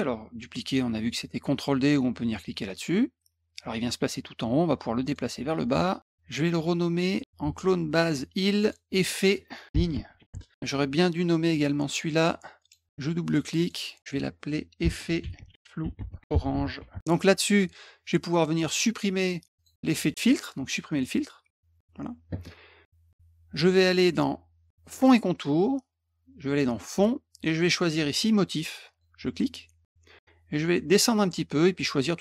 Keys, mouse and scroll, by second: 2.6 click, 5.0 click, 5.6 click, 8.5 click, 8.6 click, 9.0 click, 9.4-10.5 typing, 12.6 click, 13.2 click, 13.6 click, 14.0 click, 14.5-17.5 typing, 17.3 click, 19.5 click, 20.9 click, 24.9 click, 26.9 click, 28.8 click, 30.9-31.9 scroll down 6.